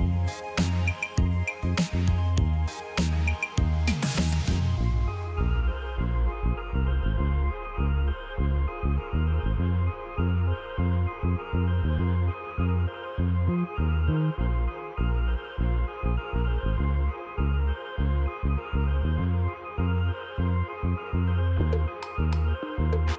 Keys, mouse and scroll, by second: 0.1 Return, 1.7 Return, 2.0 ctrl+click, 3.5 ctrl+a, 5.2 ctrl+d, 5.4 ctrl+d, 9.9-11.5 typing, 12.5 ctrl+a, 16.0 ctrl+click, 21.2-21.6 scroll down 1, 22.3-22.7 scroll, 22.7 ctrl+click.